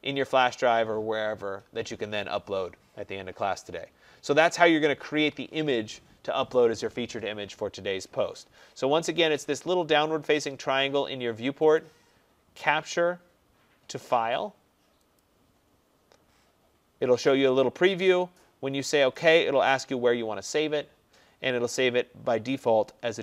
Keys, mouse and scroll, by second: 5.1 click, 11.8 click, 15.3 click, 19.3 click.